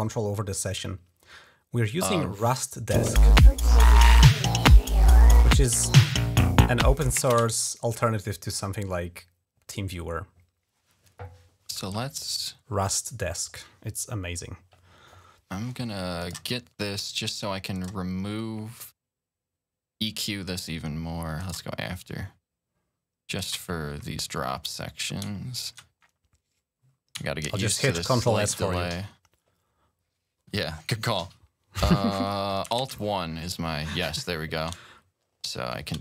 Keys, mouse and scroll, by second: 2.7 space, 7.0 space, 8.0 scroll down 2, 9.8 click, 10.5 right click, 13.7 click, 16.0 click, 17.5 click, 18.9 click, 21.2 click, 22.3 click, 23.2 click, 25.3 ctrl+scroll down 2, 25.9-27.7 scroll down 5, 28.6 ctrl+click, 28.7 s, 29.5 click, 31.0 ctrl+s, 32.6 alt+1, 34.7-35.3 shift+scroll up 3.